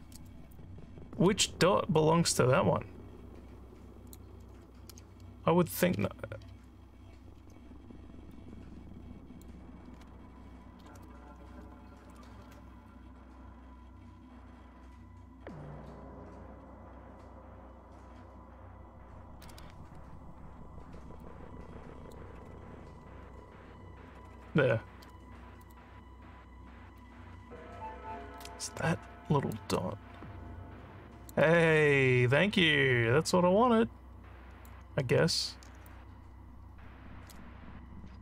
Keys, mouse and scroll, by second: 0.5-4.2 alt+drag, 4.9 w, 5.9 w, 6.4 w, 7.3 w, 8.3-9.3 drag, 21.2 click, 25.7 click, 27.0-28.4 drag, 29.6-31.3 drag, 31.9-34.7 alt+drag, 35.9-37.4 drag.